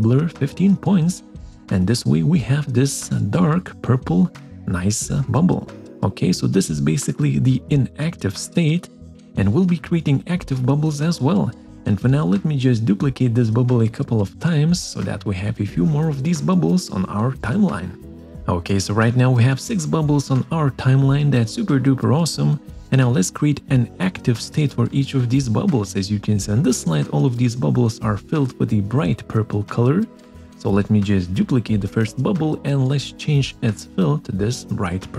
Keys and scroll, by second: 1.9 Return.